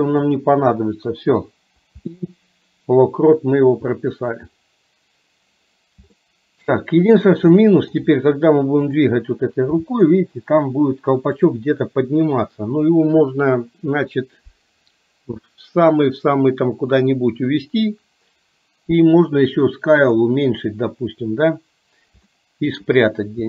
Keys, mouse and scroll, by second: 2.1 i, 4.0-4.3 middle drag, 6.2-6.8 shift+middle drag, 7.6-8.0 shift+middle drag, 9.0 click, 10.0 g, 20.1 click, 22.3-22.7 shift+middle drag.